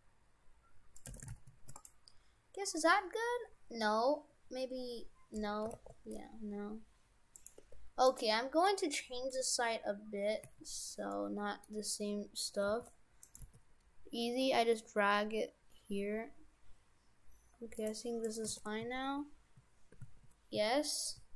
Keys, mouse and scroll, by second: 1.1 shift+f, 5.7 r, 7.6 Tab, 8.1 right click, 8.7 middle click, 9.4-10.5 scroll down 11, 10.5 a, 11.1 middle click, 12.7 g, 13.4 g, 18.3 right click, 18.5 shift+f.